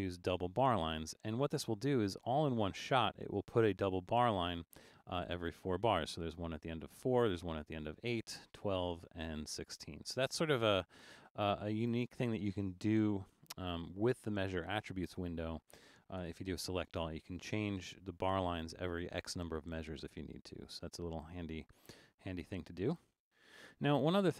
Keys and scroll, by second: 11.8 super+z, 15.1 super+a, 16.2 Return.